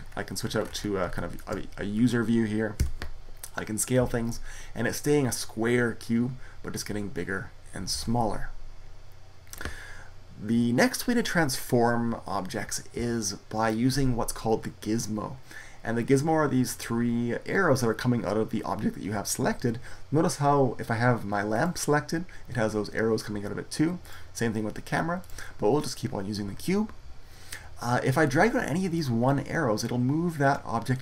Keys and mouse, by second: 2.6 s, 7.8 ctrl+z, 21.4-26.9 right drag, 28.8-30.6 drag.